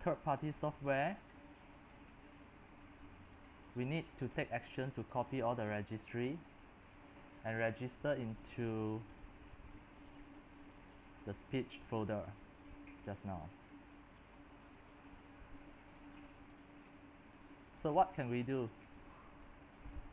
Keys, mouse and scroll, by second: 0.0-7.5 drag, 7.9-12.7 drag, 13.4-20.1 drag.